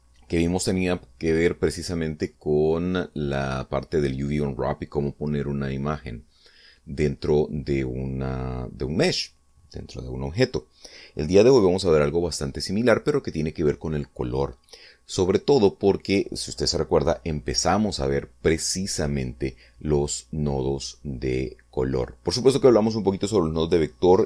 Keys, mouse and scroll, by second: 3.5-4.7 middle drag, 7.0 middle click, 11.4 middle click.